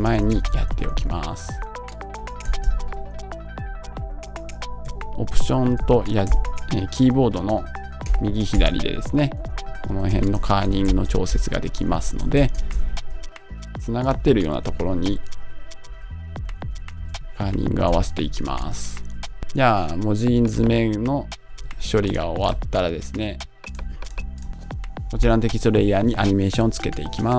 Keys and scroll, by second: 2.6 Right, 3.8 Right, 4.8 alt+Right, 5.2 alt+Right, 8.0 alt+Left, 9.4 alt+Up, 10.1 alt+Left, 10.6 Right, 11.4 alt+Right, 12.0 Left, 14.9 alt+Right, 15.8 alt+Left, 16.6 alt+Down, 17.0 Right.